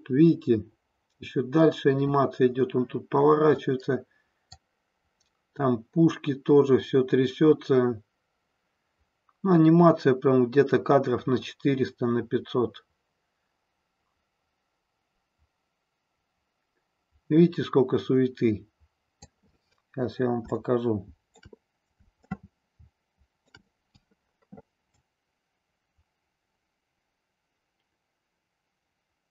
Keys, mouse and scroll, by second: 4.6-19.3 drag, 20.6 shift+middle click, 22.2-23.6 shift+middle drag, 24.8-29.3 drag.